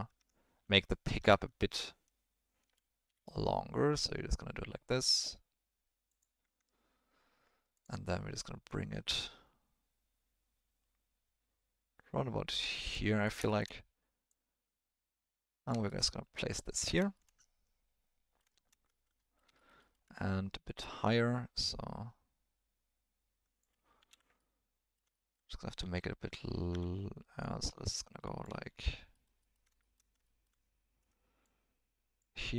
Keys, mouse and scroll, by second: 0.2 Tab, 0.6 1, 1.2 e, 6.4 Tab, 7.7 click, 8.7-12.9 drag, 13.5 shift+middle drag, 14.3-15.7 drag, 16.7 middle drag, 17.1 shift+middle drag, 17.4-18.4 middle drag, 18.6 shift+middle click, 19.0 ctrl+middle click, 19.3 middle click, 20.8-23.6 drag, 24.0 ctrl+z, 24.3-25.0 middle drag, 25.1 ctrl+middle drag, 25.8 s, 27.4-28.4 drag, 29.9 shift+middle click, 30.3 ctrl+middle click, 31.5 click.